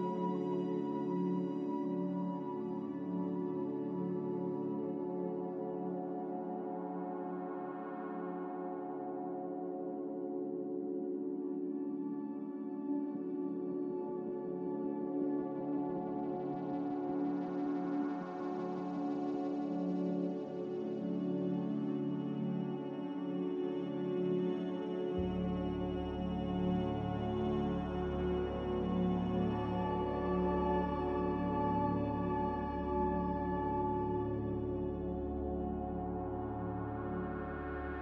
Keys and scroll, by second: 1.4 3, 8.9 2.